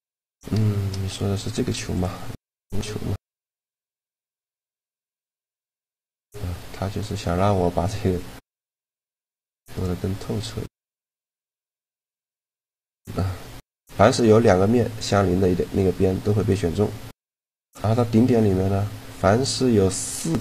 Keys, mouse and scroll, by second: 0.6 shift+a, 1.7 x, 2.4 s, 3.6-5.3 drag, 3.7 s, 7.8-11.0 drag, 9.5 right click, 11.0 shift+g, 12.8-14.6 middle drag, 16.3 middle click, 16.8-18.7 drag, 17.6-19.2 right drag, 19.2 middle click, 19.4 right click.